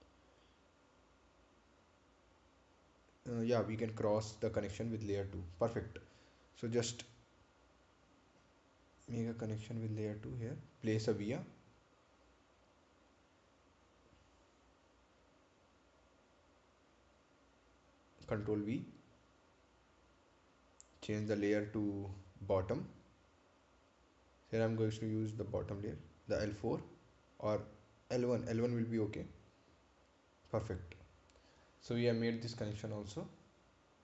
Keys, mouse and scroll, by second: 6.8 click, 14.6 click, 19.6 right click, 21.4 ctrl+v, 22.2 click, 23.4 right click, 24.5 click, 28.8 click, 32.6-33.1 scroll down 1.